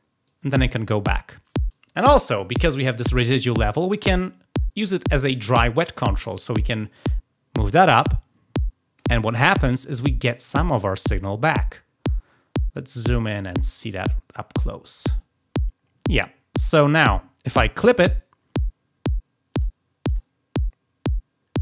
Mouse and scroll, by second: 0.2 click, 6.6-8.9 drag, 13.1 click, 13.3 click, 13.4 click, 13.8 click, 14.0 click, 16.5-18.3 drag, 19.5 click, 20.0 click.